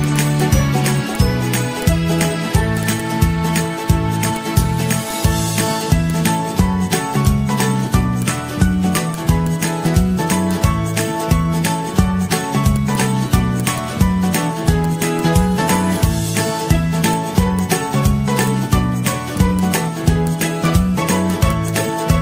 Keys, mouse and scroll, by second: 2.2 ctrl+z, 9.0 z, 9.5 z, 17.9 ctrl+-, 18.0 ctrl+-, 18.9 ctrl+-, 19.8 g.